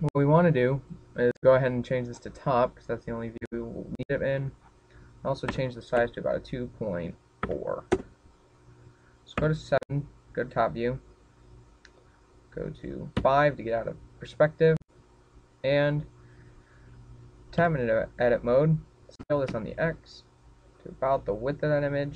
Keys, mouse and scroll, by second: 0.3-1.0 scroll down 3, 1.0-1.6 scroll down 2, 1.6 click, 3.5-3.8 scroll down 1, 5.1 click, 10.0 KP_7, 13.9 KP_5, 15.0-16.3 scroll up 5, 16.3-17.0 scroll up 2, 18.3 Tab, 19.9 s.